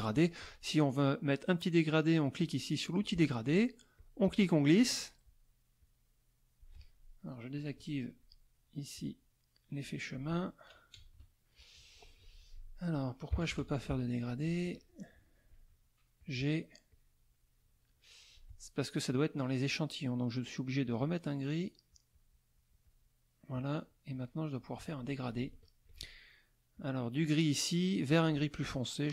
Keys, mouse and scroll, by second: 2.4 click, 3.9-5.4 drag, 5.8-6.8 drag, 7.6 click, 8.9-10.3 drag, 10.9 KP_Add, 11.6 middle click, 12.2 F2, 12.5 click, 13.3 KP_Subtract, 13.5 KP_Add, 14.4 click, 16.2 click, 16.9-18.5 drag, 21.0 click, 21.9-23.2 drag, 24.1-26.0 drag, 26.7 click, 28.1 click.